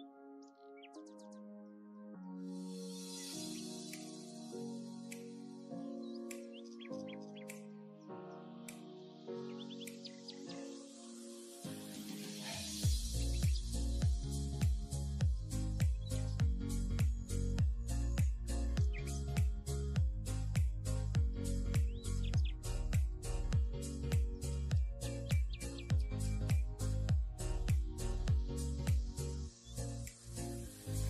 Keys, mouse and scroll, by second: 0.5 alt+z, 3.0 Tab, 4.0 click, 5.7 h, 6.0-6.6 middle drag, 6.6 click, 6.9 Tab, 7.2 middle click, 8.0 3, 8.3 click, 10.4 click, 10.8-11.5 middle drag, 11.5 shift+click, 11.7-13.0 middle drag, 13.0 click, 13.2-14.4 middle drag, 14.4-14.9 scroll up 1, 14.9 ctrl+r, 17.1 scroll up 1, 17.2-18.3 middle drag, 18.3 KP_7, 19.8 click, 20.8 click, 21.0 click, 21.4 shift+middle click, 21.7-22.2 scroll up 2, 22.2 scroll down 1, 22.5 k, 25.2 k, 27.4 k, 29.1 k, 30.5 scroll down 4, 30.7 middle click.